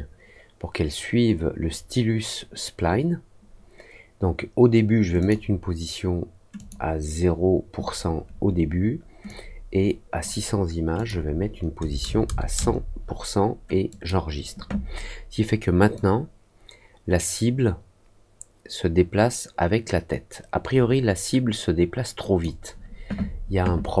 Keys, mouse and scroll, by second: 5.1 click, 6.5 click, 9.2 click, 10.9 click, 13.8 click, 15.9-22.3 drag.